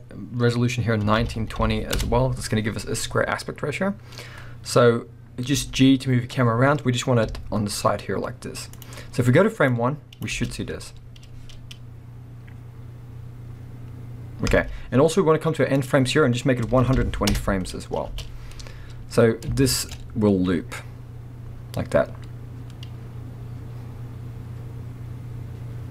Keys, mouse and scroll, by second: 2.0 Return, 2.9-5.6 scroll down 1, 5.6 g, 9.0-9.4 scroll up 1, 9.7-19.9 drag, 10.3 space, 14.5 space, 17.4 Return, 18.1 space, 18.8-19.5 scroll up 2, 19.9-25.9 middle drag.